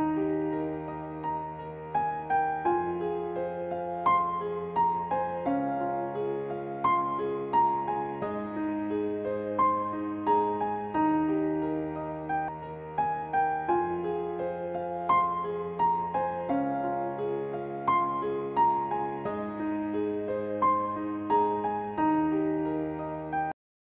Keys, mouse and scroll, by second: 0.0 click, 1.8-3.5 scroll down 1, 7.5 click, 7.7-9.0 scroll down 1, 9.4-9.9 scroll down 1, 9.9-10.9 scroll up 1, 11.0-11.4 scroll up 1, 11.4-12.4 scroll down 1, 14.0 click, 14.4 scroll down 1, 14.7-16.3 scroll up 1, 16.3-17.1 scroll down 1, 17.1-19.0 scroll down 1.